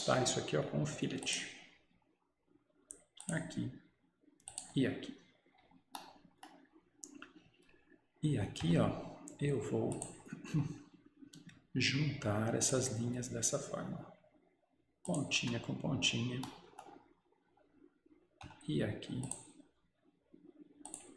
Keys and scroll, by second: 15.4 Escape.